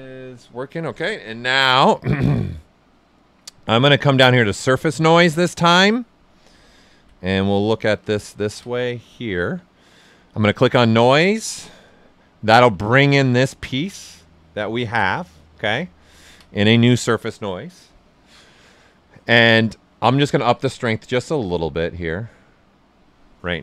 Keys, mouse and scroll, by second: 2.7-6.1 drag, 6.1 alt+right click, 6.7 ctrl+right click, 7.5 alt+right click, 8.7-10.3 ctrl+alt+right drag, 10.3 click, 11.5-13.7 right drag, 13.8-20.5 ctrl+alt+right drag, 20.5-21.8 drag, 21.8-23.6 drag.